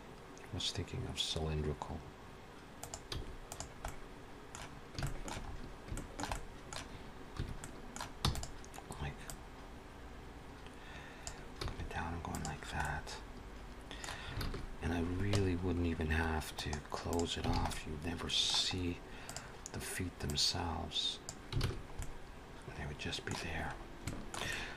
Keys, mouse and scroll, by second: 3.1 s, 3.7 middle click, 4.9 shift+middle click, 5.3-5.8 scroll up 4, 5.8 shift+middle click, 6.2 middle click, 7.2 1, 7.4 middle click, 8.1 e, 9.1 click, 11.4 s, 12.7 middle click, 14.2 alt+a, 15.2 Tab, 16.4 right click, 17.5 alt+a, 17.5 middle click, 18.6-19.4 scroll up 2, 19.1 click, 20.1 click, 21.4 alt+a, 21.5 scroll down 4, 21.8 middle click, 23.5-23.9 scroll up 2, 23.9 shift+middle click, 24.3 middle click.